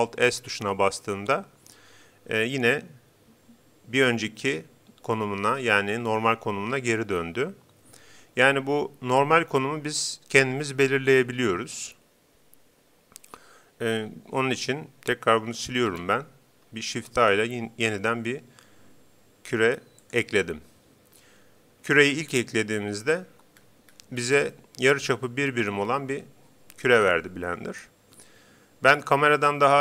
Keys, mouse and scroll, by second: 15.6 Delete, 16.9 shift+a, 23.5-25.9 middle drag, 28.9-29.8 scroll down 1.